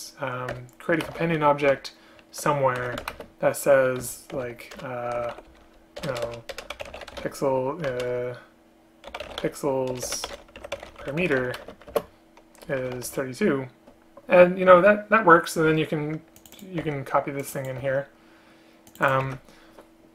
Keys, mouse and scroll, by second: 0.6 Return, 1.2 space, 1.8 Return, 3.2 space, 4.9 BackSpace, 6.1 BackSpace, 6.3 BackSpace, 8.0 ctrl+BackSpace, 10.1 BackSpace, 11.7 shift+space, 16.9 ctrl+c, 17.9 ctrl+v, 19.4 ctrl+v.